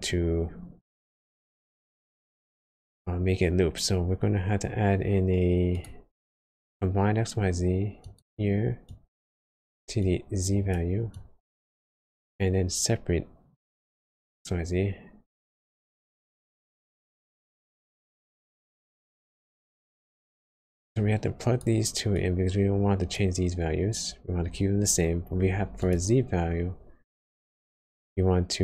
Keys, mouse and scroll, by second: 0.0 shift+a, 8.8 click, 12.3 shift+a, 16.0 click, 20.9 click, 25.8 click, 27.0 shift+a.